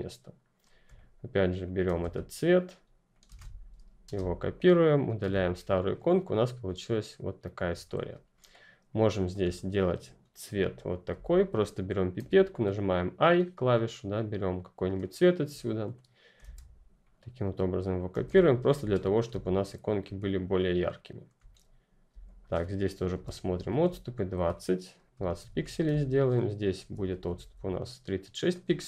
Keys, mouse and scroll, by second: 0.8 v, 0.9 ctrl+click, 1.8 ctrl+c, 2.3 click, 3.3 v, 4.0 Return, 4.9 click, 5.1 Delete, 6.0-6.7 ctrl+scroll down 1, 6.7 scroll down 1, 6.8-7.6 scroll up 1, 7.6-8.2 ctrl+scroll down 1, 8.5 ctrl+click, 9.4-11.0 scroll up 1, 11.0 o, 12.1 [, 13.2 ], 14.9 click, 16.3 ctrl+c, 16.9 ctrl+click, 18.0 ctrl+v, 18.9 click, 19.3-20.0 ctrl+scroll down 1, 20.0-20.6 scroll down 2, 20.6-21.4 ctrl+scroll up 1, 21.4-22.0 scroll up 1, 22.0 alt+click, 24.0 shift+click, 25.3 ctrl+g, 26.7 alt+Up, 28.7 click.